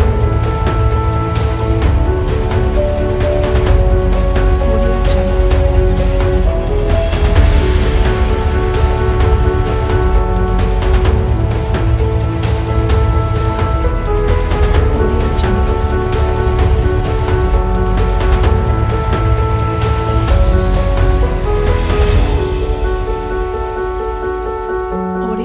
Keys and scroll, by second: 0.9 space, 8.1 space.